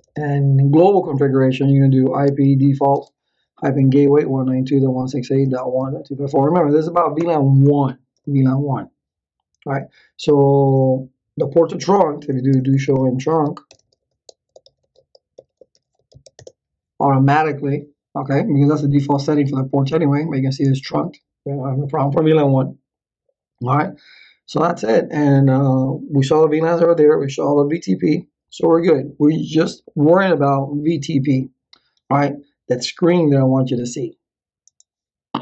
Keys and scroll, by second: 0.0-0.2 typing, 1.7-6.9 typing, 7.2 Return, 12.0-16.6 typing.